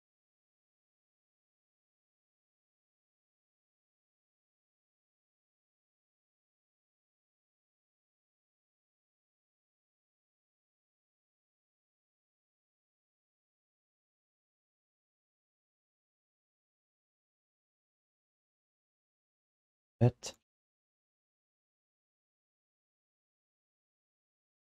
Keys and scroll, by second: 2.1 alt+shift+d, 5.8 q, 8.2 g, 9.7 alt+shift+d, 10.8 3, 17.0 1, 17.3 alt+q, 18.3 alt+shift+d, 18.5 ctrl+s.